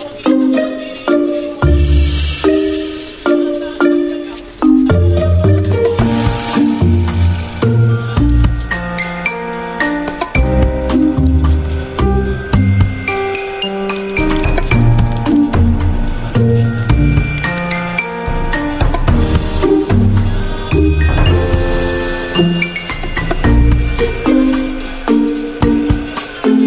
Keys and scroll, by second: 3.3 v, 7.1 r, 15.9 ctrl+z, 18.7-20.8 typing, 22.1-22.9 typing.